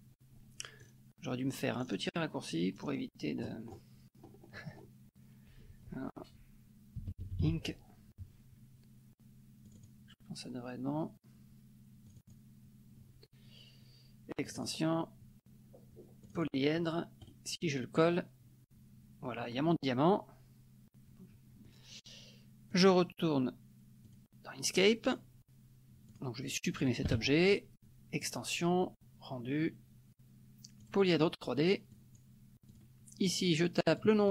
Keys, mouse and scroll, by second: 0.8-1.4 scroll down 2, 1.8-2.8 scroll down 2, 2.8-3.1 scroll down 1, 3.4-5.0 scroll up 3, 6.8-8.0 typing, 9.6 click, 12.1 click, 14.4 click, 16.4 click, 17.3 right click, 17.9 click, 22.7 click, 24.1 click, 25.0 click, 26.1 click, 27.1 Delete, 28.2 click, 30.9 click, 31.9 click, 32.6 click, 34.0 click.